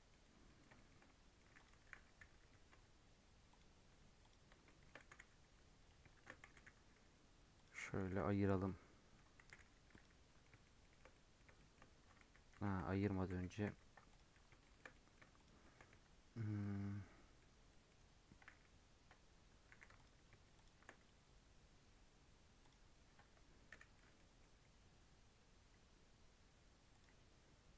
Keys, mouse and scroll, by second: 0.4 scroll up 3, 0.7 shift+middle drag, 1.0 scroll down 1, 1.1-1.5 middle drag, 1.5 click, 1.7 g, 4.2 click, 4.6 shift+middle click, 4.9 g, 6.1 shift+Tab, 6.4 g, 8.0 g, 8.6-9.4 middle drag, 9.4 g, 10.1 scroll down 3, 10.4-12.2 middle drag, 12.2 ctrl+z, 12.5 ctrl+z, 12.7 ctrl+z, 13.0 ctrl+z, 13.2 ctrl+z, 13.6 ctrl+z, 14.0 click, 14.3-14.8 shift+middle drag, 14.8 scroll up 1, 14.9-15.3 middle drag, 15.3 shift+click, 15.6 shift+middle drag, 15.8 Tab, 16.5-17.6 middle drag, 17.6 scroll up 1, 17.8-19.6 middle drag, 19.6 2, 19.9 alt+click, 20.5 alt+shift+click, 21.0-23.7 right drag, 23.7 /, 23.9 middle click, 24.1 scroll up 2, 24.3 middle click, 24.6-25.0 scroll down 5, 25.0 scroll up 3, 26.9 click.